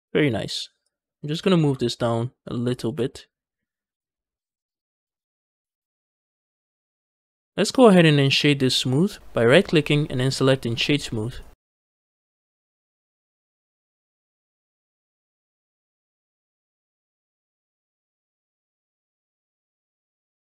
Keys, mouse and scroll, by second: 0.7 click, 0.7 scroll up 1, 1.0 scroll down 1, 1.2 g, 1.4 z, 2.6 shift+click, 2.9 middle click, 3.6-5.4 middle drag, 5.5 Tab, 5.7 scroll down 1, 5.8 middle click, 6.9 shift+middle click, 7.2 middle click, 7.6-8.2 scroll up 1, 8.2 right click, 9.4-11.3 right drag, 11.6-12.8 middle drag, 12.8 click, 13.0-14.4 middle drag, 14.4 scroll up 2, 14.7 middle click, 15.0 Tab, 15.2 middle click, 16.3 z, 16.5-18.9 middle drag, 18.9 z, 19.2 scroll down 1, 19.5-20.5 middle drag.